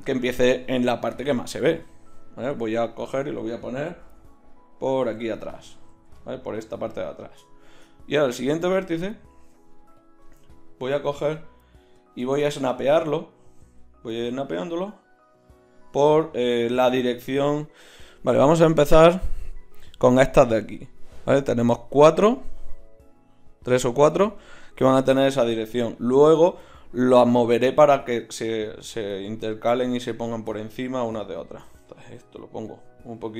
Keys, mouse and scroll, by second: 4.0 g, 5.9 g, 9.0-10.0 drag, 9.3 g, 11.1 g, 13.6 g, 31.4 click, 31.8 g, 32.0-33.1 drag.